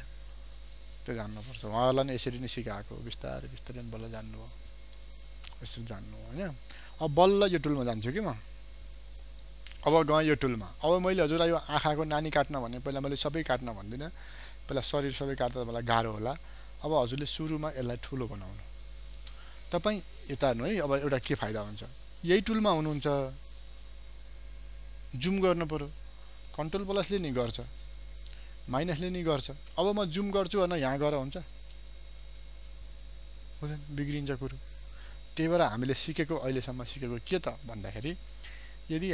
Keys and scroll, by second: 2.0 ctrl+0, 17.3 ctrl+space, 36.0 ctrl+0, 37.9 ctrl+d, 38.9 ctrl+space.